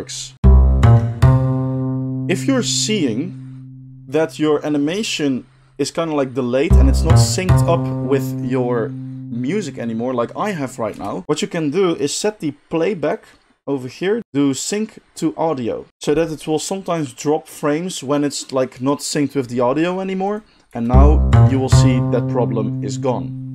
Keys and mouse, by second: 0.3 space, 10.9 space, 20.7 space.